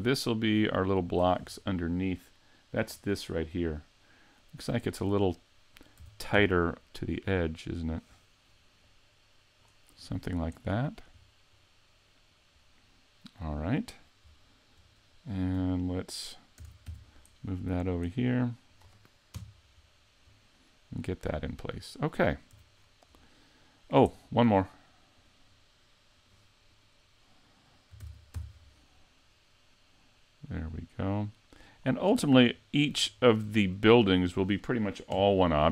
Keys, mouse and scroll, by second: 0.0 click, 1.4-1.8 scroll up 2, 2.4 middle click, 2.9-3.2 scroll up 2, 4.0 middle click, 4.9 shift+middle click, 6.0 s, 8.0 click, 8.9 click, 10.2-10.7 scroll up 4, 10.7 middle click, 11.2-11.9 scroll down 4, 11.7 middle click, 12.6-13.2 scroll down 1, 13.2 middle click, 13.7 scroll down 3, 14.5 shift+middle click, 16.7 shift+d, 19.4 KP_Decimal, 20.6 middle click, 22.0-22.6 scroll down 2, 22.6 a, 22.8-23.8 scroll down 7, 23.8 scroll down 1, 24.1 shift+middle click, 25.2 right click, 26.2 right click, 26.7 right click, 28.0 shift+d, 31.8 click, 32.1-33.3 scroll up 3, 32.6 shift+middle click, 33.3-33.7 scroll up 1, 33.7 shift+middle click, 34.1-35.0 scroll up 1, 35.0 scroll up 1, 35.1 KP_Decimal.